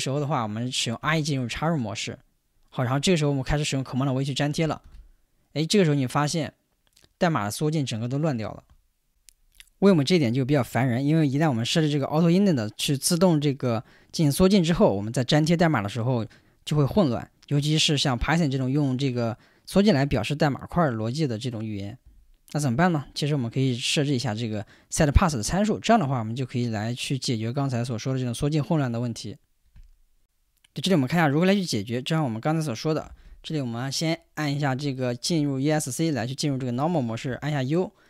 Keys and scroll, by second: 1.0 i, 4.8 super+v, 8.5 Escape, 35.0 Escape, 37.3 u.